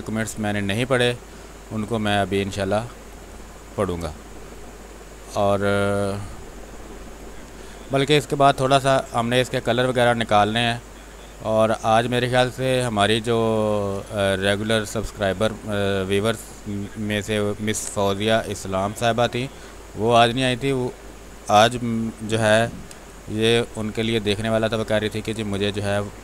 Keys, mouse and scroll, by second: 1.8 click, 3.0 space, 3.2 click, 3.5 space, 4.3-7.1 drag, 7.1 space, 7.3 click, 7.6 space, 8.2-10.4 drag, 10.4-13.0 drag, 13.0 space, 13.2 click, 13.5 space, 14.3-16.8 drag, 16.8 space, 17.0 click, 17.3 space, 18.5-20.9 drag, 20.9-23.6 typing, 21.1 click, 21.8 click, 23.0 click, 24.0-25.8 drag, 25.8 space, 26.1 click.